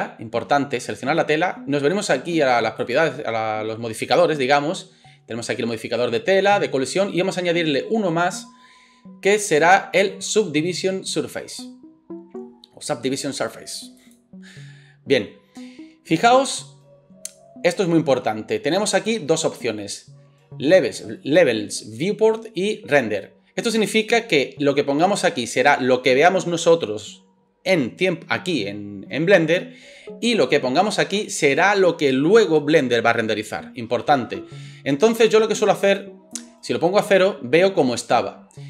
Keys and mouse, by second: 2.9-7.2 middle drag, 7.2-38.6 drag.